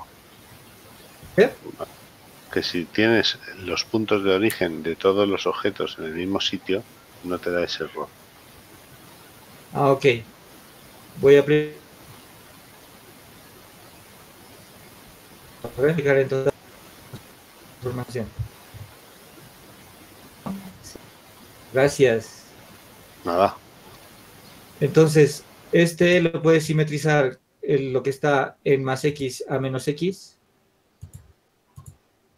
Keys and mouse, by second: 0.9 ctrl+alt+u, 9.0-10.1 drag, 15.8 ctrl+a.